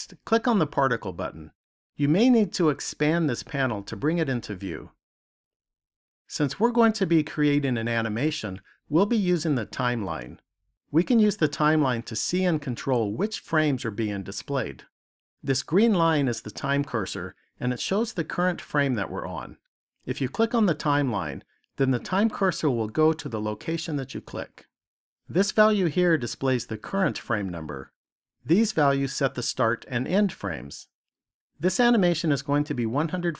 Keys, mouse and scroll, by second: 0.9 click, 6.2 click.